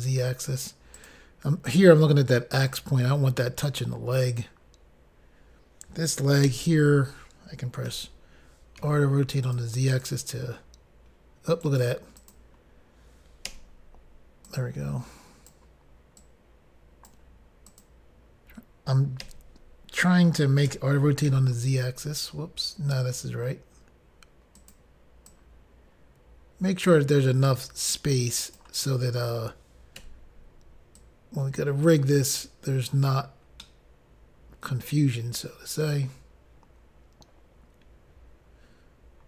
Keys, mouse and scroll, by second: 1.2 click, 1.3 click, 1.9 click, 4.5 click, 4.7 click, 9.0 r, 9.0 z, 9.7 click, 9.8 click, 10.3 click, 11.9 right click, 12.0 click, 12.4 click, 12.6 click, 13.8 i, 14.7 click, 16.5 click, 18.0 click, 18.1 click, 19.5 l, 21.5 r, 21.5 z, 24.8 click, 25.0 click, 25.5 click, 28.2 click, 30.3 i, 31.2 click, 33.9 middle click.